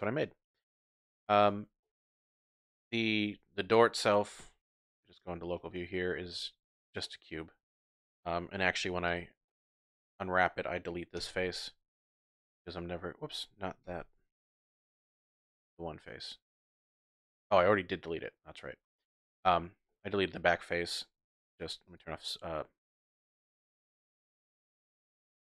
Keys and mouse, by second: 1.4 click, 1.8 drag, 2.0-2.5 middle drag, 2.5-5.1 typing, 2.8 drag, 3.1 click, 5.0 ctrl+click, 5.3 Tab, 5.6-6.2 drag, 7.0-7.7 drag, 7.8 Tab, 8.9 3, 9.1 click, 9.5 click, 11.2 x, 13.0 click, 13.9 ctrl+z, 14.4 click, 15.2-16.7 drag, 16.8-17.8 typing, 17.2 click, 17.5-18.5 drag, 19.4 Tab, 19.9 drag, 21.9 click, 23.7 click, 24.1 Tab, 25.3 Tab.